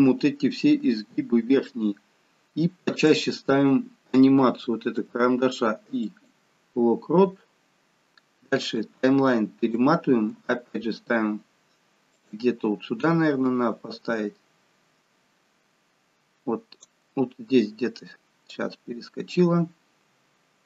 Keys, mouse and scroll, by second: 0.8 g, 5.0 i, 8.7 click, 10.4 g, 13.5 click, 18.5 click.